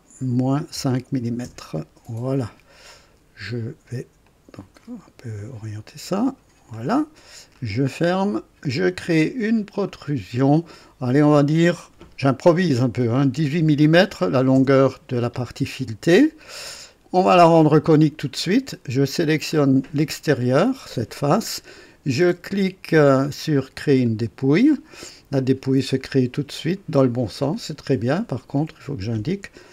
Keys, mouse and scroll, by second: 0.4 KP_Subtract, 0.7 KP_5, 1.4 Return, 4.2 click, 6.1 click, 7.5 click, 9.8 click, 13.3 KP_1, 13.6 KP_8, 14.5 Return, 17.3 click, 19.5 click, 24.0 click, 25.4-27.7 drag, 28.6 click.